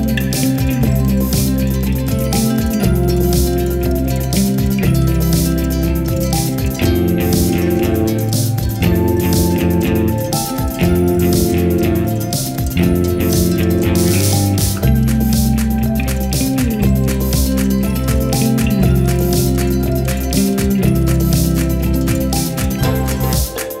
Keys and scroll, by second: 0.2 g, 0.3 z, 2.7 0, 3.2 1, 3.3 0, 3.5 Return, 6.9 5, 7.0 0, 7.1 Return, 8.1 5, 8.2 0, 8.5 Return, 15.3 5, 15.8 0.